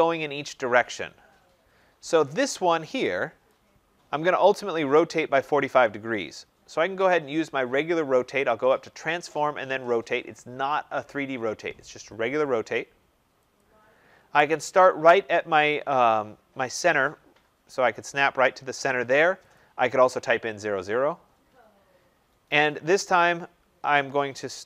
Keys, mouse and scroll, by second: 1.4 middle click, 2.1 middle click, 2.2 click, 3.4 click, 8.6 click, 13.7 click, 16.2-18.5 scroll up 6, 19.5 click, 21.7 scroll down 5, 22.2 scroll.